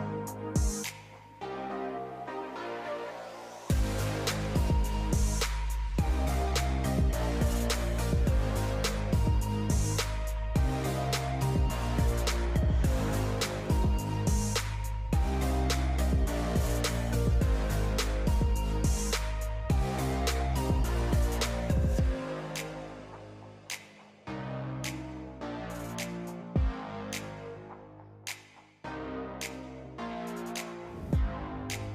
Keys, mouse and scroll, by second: 0.3 g, 2.6 click, 3.9 g, 6.4 click, 7.6 g, 8.7-9.5 scroll down 2, 9.5 Tab, 10.5 g, 12.1-13.1 scroll up 1, 13.1-15.4 drag, 16.5 click, 16.8 click, 19.2 click, 20.4 click, 20.8 click, 21.4 Tab, 22.2 click, 24.3 click, 25.8 click, 27.1 click, 28.3 click, 29.5 shift+click, 31.0 click, 31.4 click.